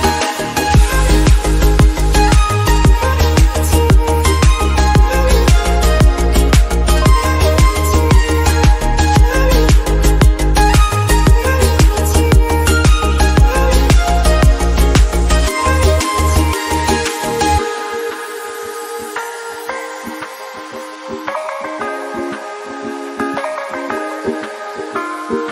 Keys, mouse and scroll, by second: 2.7 KP_0, 3.7-4.3 scroll down 2, 4.3-5.0 middle drag, 5.0 shift+a, 6.3 click, 7.0 KP_Decimal, 7.4 scroll down 1, 7.5 middle click, 7.9-9.1 drag, 9.1 middle click, 9.6 click, 10.5-10.9 scroll down 3, 11.1 click, 11.8 KP_0, 13.2 scroll down 1, 13.4-14.6 middle drag, 14.6 click, 15.2 KP_0, 15.3 KP_0, 18.8 click, 20.0 click, 22.3 click, 22.6 ctrl+z, 23.0 click, 23.5 KP_0, 24.7-25.5 middle drag.